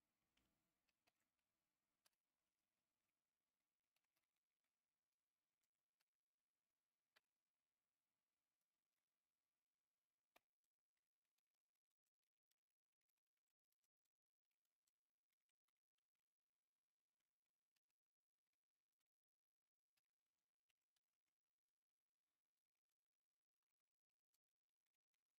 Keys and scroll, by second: 0.8-2.0 typing, 3.7-6.0 typing, 10.3-15.7 typing, 17.5-25.3 typing, 20.7 Escape.